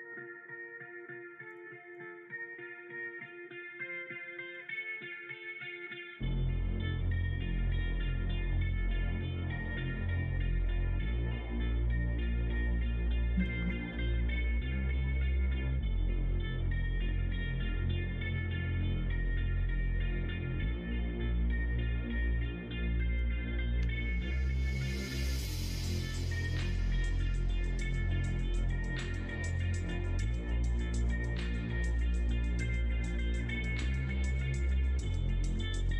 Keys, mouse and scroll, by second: 1.9 click, 2.1 middle click, 3.0 e, 4.7 e, 7.2 middle click, 7.8 e, 8.8 middle click, 9.1 e, 10.6 e, 11.9 e, 22.9 middle click, 23.7 e, 25.3 click, 26.0 middle click, 26.9 e, 29.0 click, 30.2 shift+click, 30.5 middle click, 30.9 middle click, 31.3 middle click, 31.7 e, 33.3 e, 34.9 middle click.